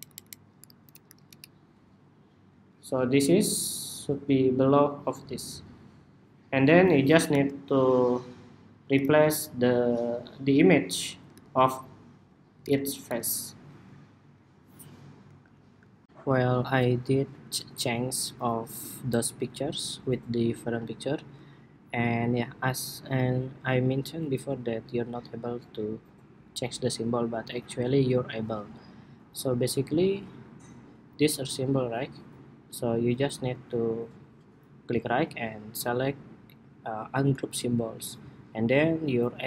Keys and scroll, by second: 15.8 shift+super+2.